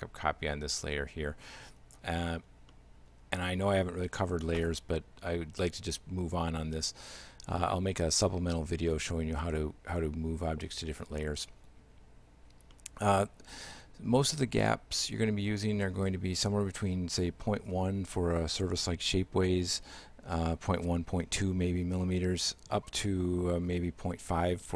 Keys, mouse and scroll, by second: 2.8 middle click, 12.8 middle click, 14.6 right click.